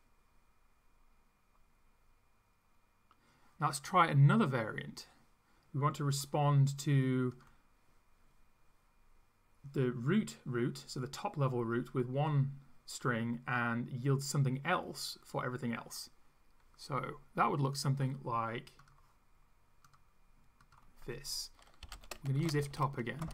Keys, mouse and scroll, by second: 17.8 click, 19.9 click, 20.6 click, 21.6-23.3 typing.